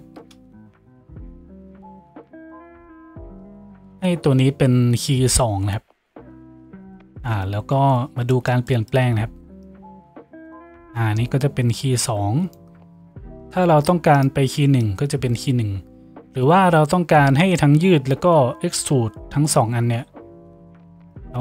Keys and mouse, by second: 2.7-9.7 middle drag, 6.1 Tab, 9.7-14.3 drag, 14.3-18.1 middle drag, 14.9-21.4 drag.